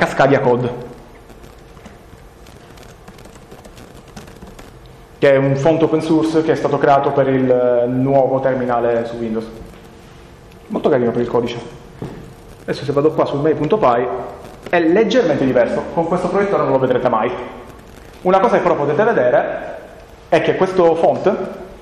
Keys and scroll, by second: 0.0 Left, 0.0 Right, 0.0 ', 0.8 Left, 3.3-5.0 typing.